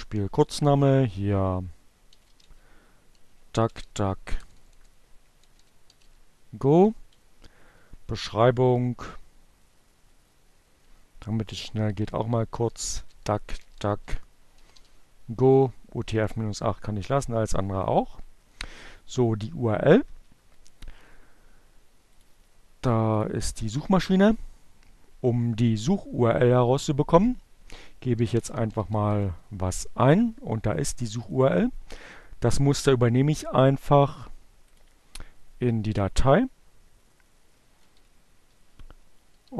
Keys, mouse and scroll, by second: 1.3-5.8 typing, 6.4 Left, 7.9 Delete, 11.6-14.1 typing, 16.7 Down, 19.3 Right, 21.7 click, 22.8 click, 26.8-27.9 typing, 31.1 click, 32.8-34.4 drag, 35.1 Right, 37.3 Left.